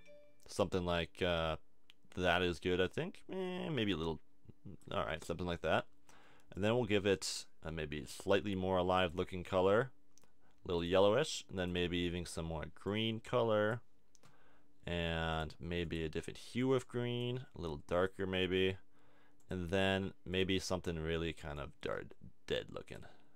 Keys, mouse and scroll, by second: 6.5-8.9 drag, 10.7-17.8 drag, 19.4-22.2 drag.